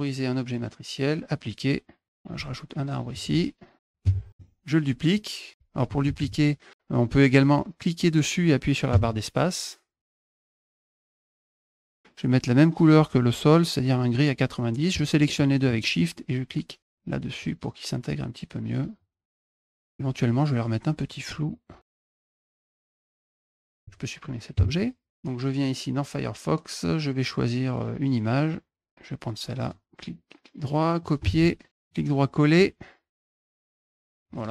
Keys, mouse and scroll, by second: 1.2 click, 1.9 click, 2.6 ctrl+shift+click, 3.2-4.3 drag, 4.3 middle click, 5.9 ctrl+z, 7.2-10.2 drag, 8.7 space, 10.5 click, 10.9 click, 11.1 ctrl+z, 11.1 click, 11.4 click, 11.6 click, 11.7 click, 14.8 shift+click, 17.2 click, 17.7-18.8 drag, 19.3 click, 19.6 shift+click, 21.9 click, 22.5 click, 23.4 click, 23.6 click, 27.0 scroll down 4, 27.0 middle click, 28.2 middle click, 29.4 right click, 30.8 click, 31.0 alt+Tab, 31.6 right click, 31.7 click, 33.2 click.